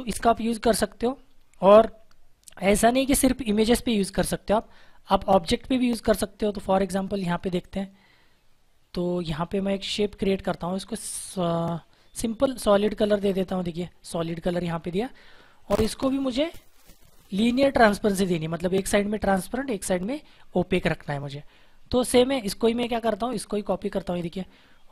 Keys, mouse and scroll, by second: 6.3 click, 13.2 click, 15.4 click, 23.1 alt+Num_Lock, 23.6 alt+click.